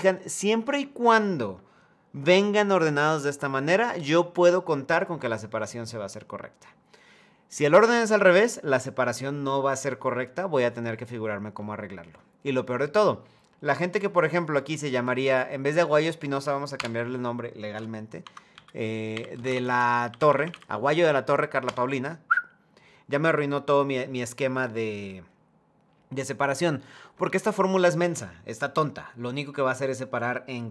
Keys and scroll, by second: 16.4 BackSpace, 17.9 Caps_Lock, 21.3 Return.